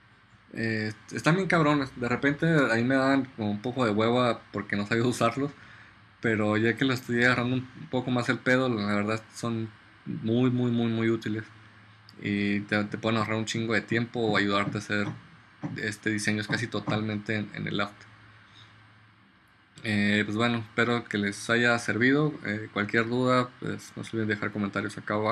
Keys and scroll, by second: 2.7 BackSpace.